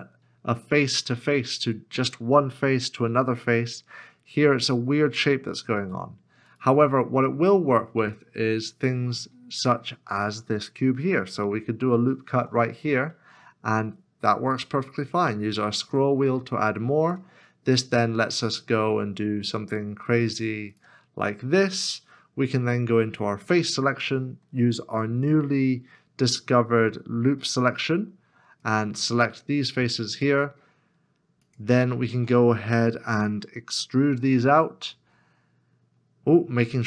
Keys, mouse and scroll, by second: 6.5 right click, 7.5 middle click, 8.1 shift+middle click, 9.7 shift+middle click, 12.3 ctrl+r, 15.4 ctrl+r, 15.5-17.8 scroll up 1, 23.4 3, 28.6 alt+l, 31.1 alt+s, 31.4 alt+shift+click.